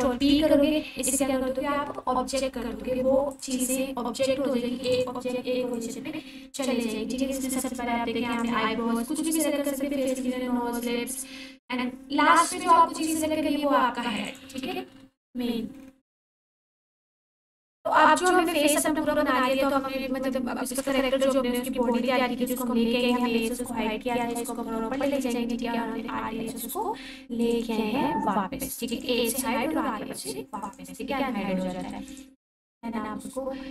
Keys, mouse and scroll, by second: 0.1 ctrl+p, 3.3 click, 6.4 r, 7.6 right click, 8.4 click, 9.9 r, 10.2 z, 14.2 right click, 15.8-17.0 scroll down 1, 17.8 alt+q, 19.5-21.0 ctrl+alt+drag, 23.0-23.9 typing, 23.0 click, 24.1 click, 25.0 alt+h, 25.9-27.4 scroll up 1, 27.4 click, 28.0-28.8 scroll down 1, 28.8 click, 28.9-29.9 typing, 30.6 click, 30.9-31.8 scroll up 1, 31.9 alt+shift+click, 32.7 click.